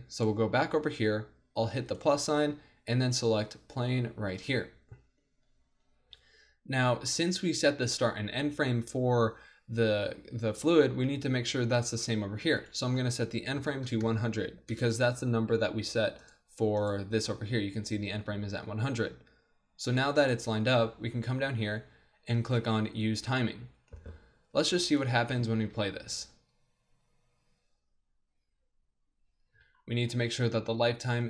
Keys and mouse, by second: 0.2-6.9 drag, 1.9-4.7 right drag, 7.2-12.5 middle drag, 12.5-14.5 drag, 14.0 KP_0, 16.2-17.3 drag, 21.0-24.7 middle drag, 24.9 middle click, 25.8 alt+a, 29.6 alt+a, 29.8-31.2 drag.